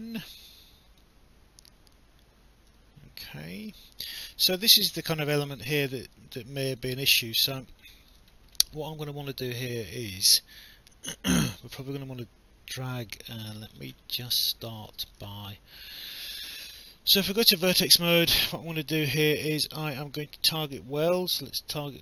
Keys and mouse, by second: 1.0 click, 3.4 alt+click, 5.0 alt+click, 6.8 alt+click, 8.1 alt+middle click, 10.7 alt+click, 14.4 alt+middle click, 14.9 alt+click, 16.8 right click, 20.4 click.